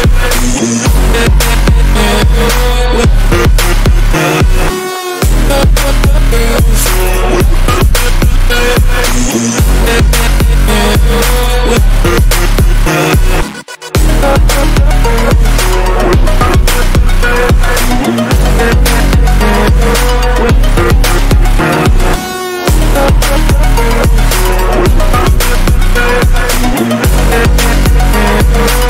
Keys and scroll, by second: 0.7 Return, 2.1 ctrl+j, 11.3 Return, 11.6 ctrl+-, 11.9 ctrl+-.